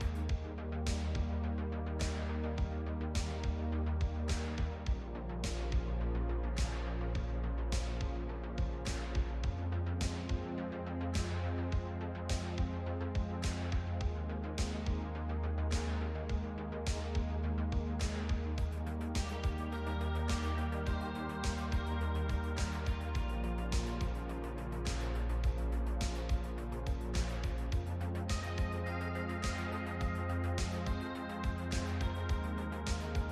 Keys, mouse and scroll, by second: 16.0 ctrl+click.